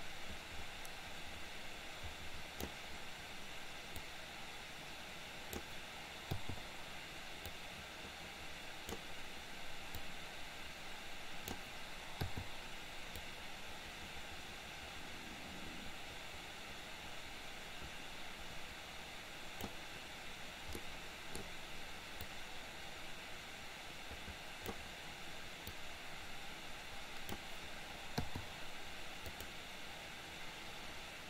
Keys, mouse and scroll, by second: 4.1-5.7 drag, 7.6-9.1 drag, 10.1-11.7 drag, 13.3-19.8 drag, 20.8 middle click, 22.3-25.0 drag, 25.7-27.5 drag, 29.3 click.